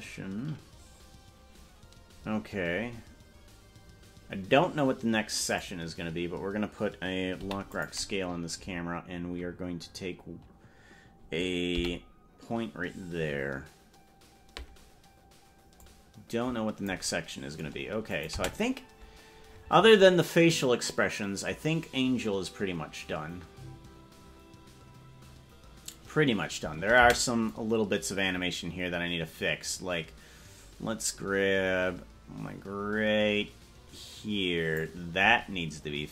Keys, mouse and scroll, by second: 0.3 scroll up 1, 0.9-2.5 scroll down 9, 2.3-3.9 scroll up 13, 5.9 right click, 7.5 i, 11.9 m, 12.9-13.7 scroll up 14, 16.0-17.1 drag, 18.3-27.1 drag, 18.5 space, 27.3 space, 27.6-35.0 drag.